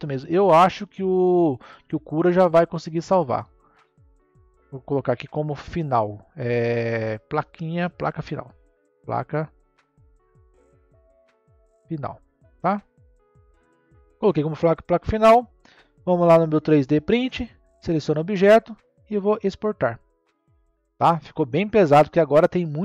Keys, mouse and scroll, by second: 0.7-3.7 middle drag, 3.8 click, 4.0-6.9 drag, 9.4 BackSpace, 16.7 click, 17.4 click, 19.1-22.6 drag.